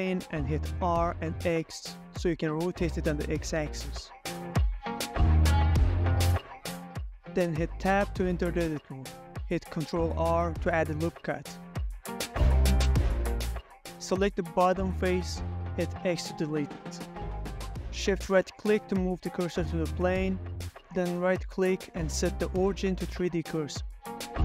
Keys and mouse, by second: 0.3 shift+a, 3.0-3.7 middle drag, 3.8 r, 4.0 x, 5.2 9, 5.3 0, 5.6 Return, 5.9 y, 7.1 click, 7.3-7.7 middle drag, 7.9 ctrl+a, 8.4 Tab, 9.1 ctrl+z, 9.1 ctrl+click, 9.1 ctrl+middle click, 9.4 middle click, 9.9 ctrl+middle click, 10.1 shift+middle click, 11.4 3, 11.9 ctrl+r, 15.6 Escape, 16.2 3, 16.4 click, 16.8 middle click, 17.1 x, 18.5 alt+Tab, 19.9 shift+right click, 20.2-20.9 ctrl+drag, 21.0 shift+drag, 21.2 shift+middle click, 22.1 ctrl+middle click, 22.4 ctrl+middle click, 23.5 click.